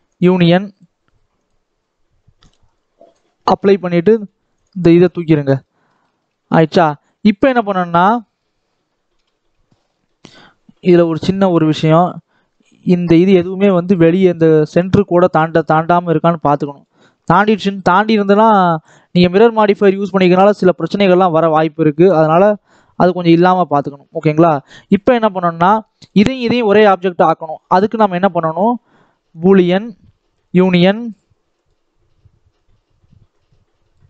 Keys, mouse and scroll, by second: 0.6 click, 2.3-4.1 drag, 4.4 click, 4.8 x, 5.5-6.9 middle drag, 6.9 click, 7.8-9.0 middle drag, 9.0 KP_7, 9.2 Tab, 9.6 scroll up 2, 9.9 shift+middle click, 10.8 click, 11.1-11.4 scroll up 1, 11.4 shift+middle click, 12.0-12.3 scroll down 2, 12.3-12.7 scroll up 2, 12.7 scroll down 1, 12.9 shift+middle click, 13.2 alt+a, 15.5-15.9 scroll up 5, 16.6-20.7 drag, 21.6 scroll down 1, 21.9 shift+middle click, 22.4 ctrl+z, 22.8-23.3 scroll down 6, 23.3 Tab, 23.5 middle click, 23.9 scroll up 1, 24.2 shift+middle click, 24.5-25.3 scroll down 1, 25.3 click, 25.9 click, 27.3 click, 29.3-30.4 drag, 30.9 click, 33.2 click.